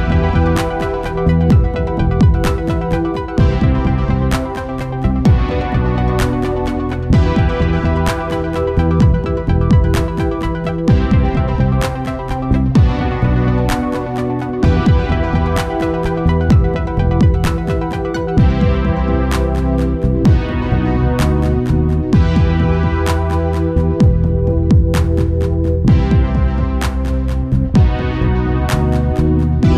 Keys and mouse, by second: 0.3-2.8 drag, 1.0 ctrl+s, 2.8 Tab, 4.9-6.4 right drag, 5.6 Tab, 5.9 a, 6.8 u, 7.6 Return, 10.4 click, 25.8-27.5 drag, 26.8 Tab, 28.1-29.7 right drag, 28.6 Tab, 29.0 a.